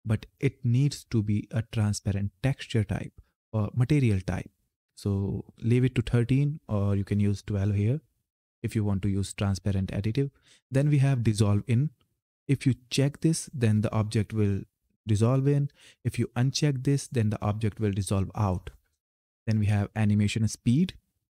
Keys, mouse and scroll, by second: 5.3 click, 12.7 click, 18.6 click, 21.1 click.